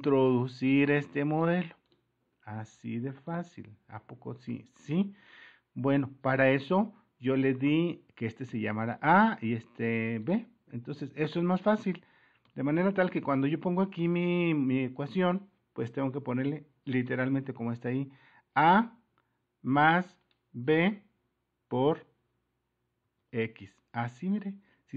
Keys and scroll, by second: 0.7 Return, 4.0 alt+Tab.